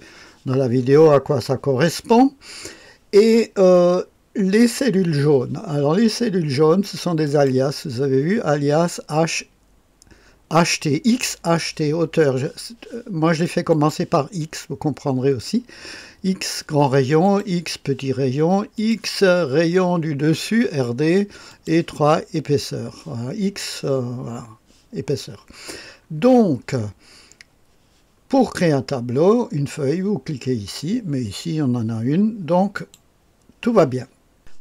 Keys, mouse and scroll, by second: 13.7 click, 17.2 click, 18.7 click, 21.4 click, 32.7 click.